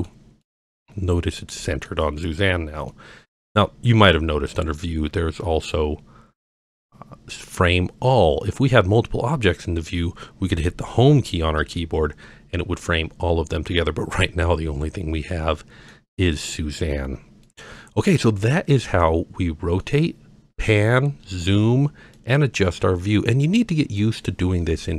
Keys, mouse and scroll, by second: 0.4-1.9 middle drag, 2.3-2.9 scroll down 2, 2.9-3.3 middle drag, 4.5-5.7 drag, 6.5-8.5 drag, 8.8-9.2 scroll down 2, 11.6 Home, 14.2-15.9 middle drag, 16.3-17.0 scroll down 2, 17.4-18.0 middle drag, 18.3-18.8 scroll down 2, 18.8-19.8 middle drag, 21.2-21.6 scroll up 4, 21.6 scroll down 3, 22.1-24.0 middle drag.